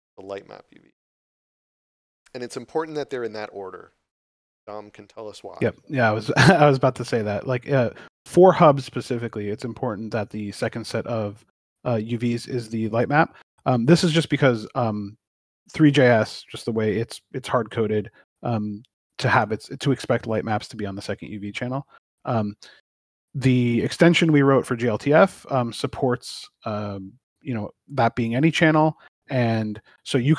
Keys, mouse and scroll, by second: 0.1 click, 1.2 scroll up 1, 10.5 middle click, 11.3 scroll up 1, 13.1 ctrl+middle click, 15.9 scroll down 1, 17.5 middle click.